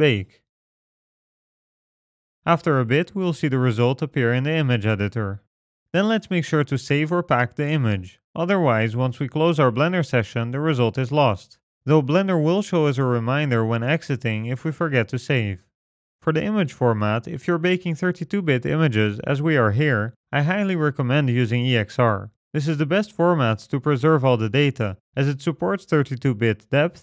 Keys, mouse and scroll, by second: 1.6 click, 5.7-7.0 scroll up 2, 7.0 scroll down 1, 8.8 click.